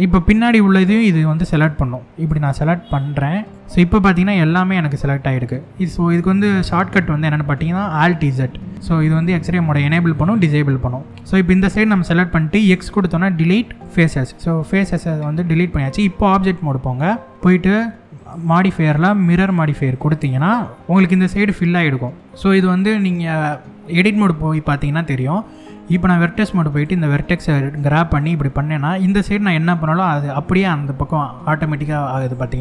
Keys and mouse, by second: 1.3 click, 2.5 click, 3.5-5.8 middle drag, 7.5-10.7 alt+z, 12.3 x, 14.5 middle click, 15.7 Tab, 16.1-16.6 middle drag, 17.3 alt+z, 18.0-19.7 drag, 22.0 middle click, 23.7 Tab, 24.3 middle click, 25.1 middle click, 25.5 1, 26.3 click, 27.1 g, 31.8 right click, 32.4 click.